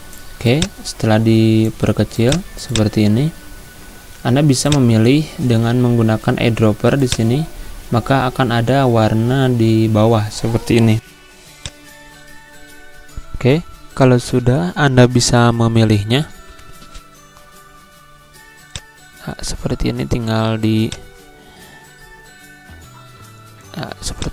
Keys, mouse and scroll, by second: 7.1 click, 11.6 click, 18.6-24.3 drag.